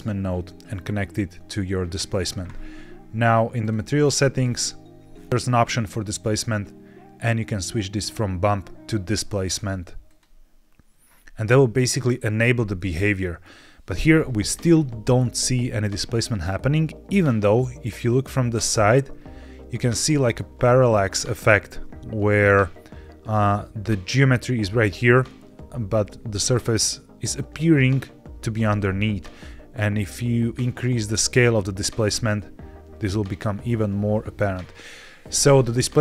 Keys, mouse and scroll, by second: 3.5 click, 3.9-5.0 scroll down 5, 5.1 scroll down 3, 5.3 click, 6.1-8.8 drag, 9.3-10.2 drag, 12.7-13.4 middle drag, 13.4-14.0 scroll down 1, 14.0-15.4 scroll up 2, 15.4-15.8 scroll down 4, 16.4-18.8 middle drag, 19.1 scroll down 1, 19.2-20.0 scroll up 4, 20.0 middle click, 20.4-21.2 scroll down 2, 21.2-22.1 scroll down 1, 27.4-28.6 scroll up 1, 30.5-34.9 shift+drag, 34.9 shift+middle click, 35.0 shift+click.